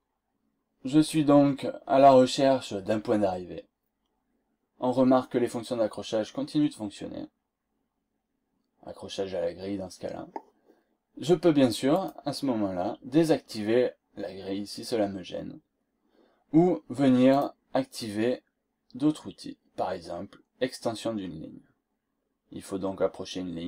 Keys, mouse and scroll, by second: 0.4 scroll down 2, 2.8 scroll up 2, 11.9 click, 14.6 scroll down 2, 15.1 scroll up 2, 17.2 click.